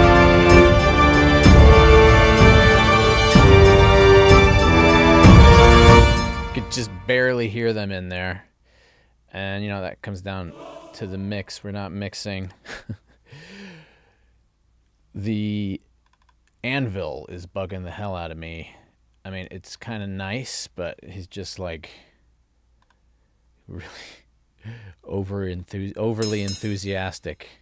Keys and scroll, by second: 5.9 space.